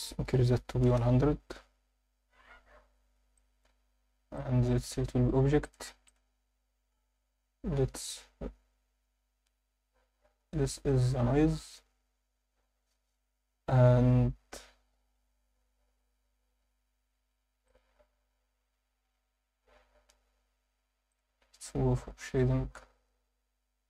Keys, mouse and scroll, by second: 2.8 scroll down 2, 3.3 alt+shift+middle click, 4.4-4.9 drag, 5.6-6.2 drag, 6.8 scroll up 1, 8.8 click, 8.8-9.2 scroll up 1, 10.4 scroll down 2, 10.9 scroll up 2, 17.7 click.